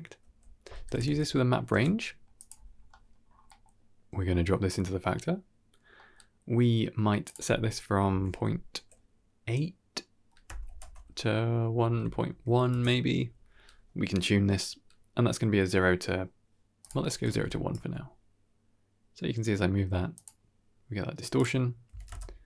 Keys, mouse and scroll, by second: 1.7-2.1 middle drag, 2.4 middle click, 2.5 scroll up 1, 3.0-3.6 middle drag, 3.6 click, 5.8 middle click, 7.1-12.6 drag, 16.7 click, 16.9 scroll down 2, 17.2 shift+space, 17.6 g, 21.2 click.